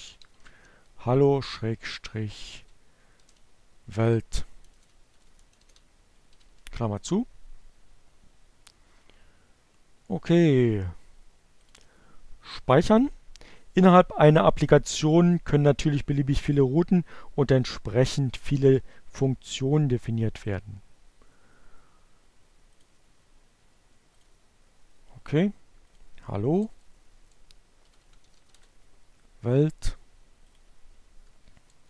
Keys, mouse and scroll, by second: 0.0-1.0 typing, 2.2 shift+BackSpace, 4.4 shift+9, 9.9 click, 20.8 click, 22.9 click, 24.4 click, 24.8-26.7 typing, 27.3 click, 28.2 BackSpace, 31.6-31.8 typing.